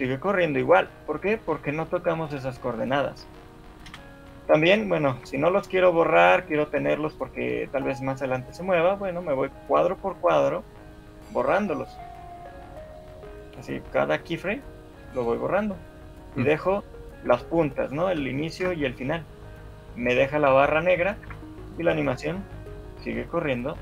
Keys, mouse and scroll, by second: 4.0 Escape, 4.6 ctrl+z, 5.0 ctrl+z, 6.2 click, 6.8 shift+click, 8.2 click, 9.4 click, 10.2 shift+click, 11.4 shift+click, 11.8 shift+click, 13.0 shift+click, 13.6 shift+click, 15.4 shift+click, 15.4 shift+middle click, 16.0 shift+click, 18.8 Delete, 21.4 alt+a.